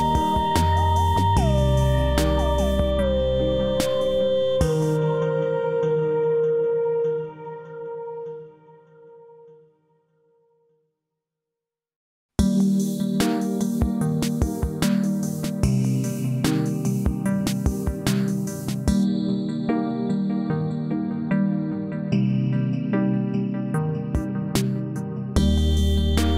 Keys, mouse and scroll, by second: 1.8-4.9 drag, 5.6 r, 6.3-8.8 drag, 12.4-13.0 drag, 14.6 scroll up 1, 15.2-15.8 alt+middle drag, 18.3-18.9 drag, 24.6 space, 24.7 click, 25.7-26.3 alt+drag.